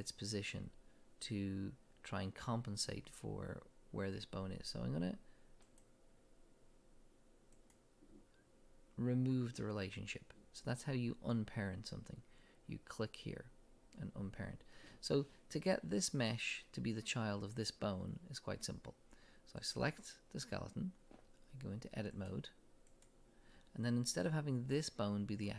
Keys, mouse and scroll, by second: 7.5 click, 19.6 click, 22.1-25.5 drag.